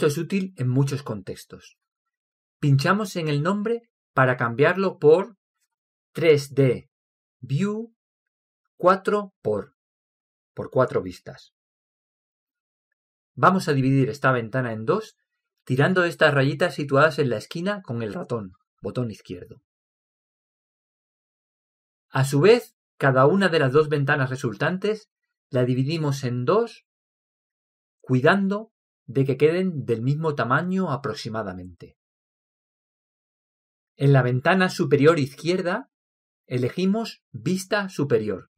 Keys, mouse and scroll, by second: 13.4-18.1 middle drag, 18.8-20.7 drag, 24.0-25.4 drag, 25.5 click.